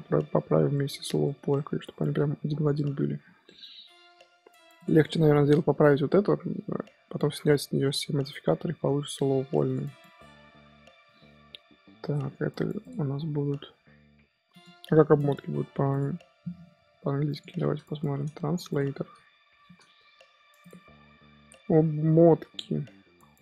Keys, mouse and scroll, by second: 0.7-4.7 middle drag, 4.7 click, 5.0-5.4 middle drag, 5.4-6.7 scroll up 1, 6.7-8.1 scroll up 1, 8.1 scroll up 1, 9.2-9.6 middle drag, 9.6 click, 9.8 scroll down 1, 10.0-12.8 middle drag, 12.8 click, 14.5 click.